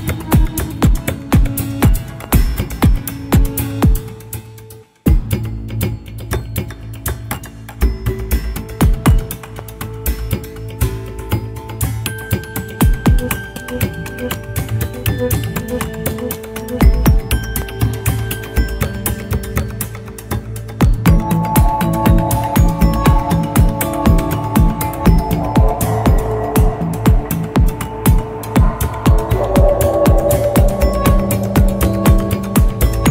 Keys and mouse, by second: 2.2 click, 3.9 click, 7.6 click, 9.0-11.2 drag, 12.7-17.2 drag, 18.5-24.7 middle drag, 26.9 click, 27.7-30.0 middle drag, 31.5-33.1 drag.